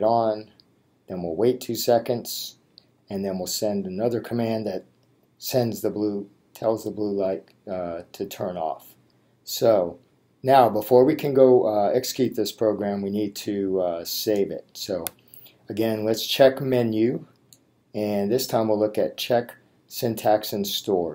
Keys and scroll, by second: 17.4 Menu, 19.1 Down.